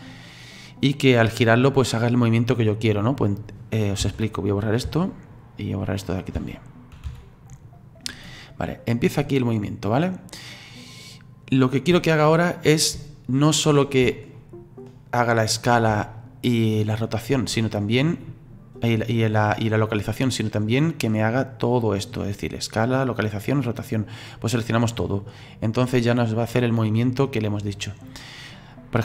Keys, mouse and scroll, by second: 3.4 right click, 5.2 Delete, 5.9 right click, 7.5 Delete, 7.8-10.8 drag, 14.4-19.9 ctrl+middle drag, 21.0-28.5 drag.